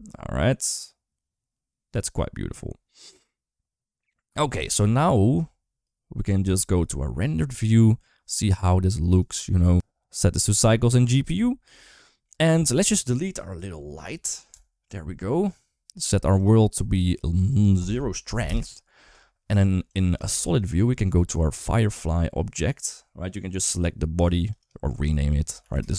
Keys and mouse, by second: 4.5 space, 5.7 click, 6.3 shift+middle click, 9.0 click, 11.7 shift+middle click, 14.3 Delete, 16.2 click, 17.4 click, 20.2 shift+middle click, 20.3 shift+middle click, 20.6 middle click, 21.7 click, 24.1 click, 24.4 click, 24.9-25.9 drag.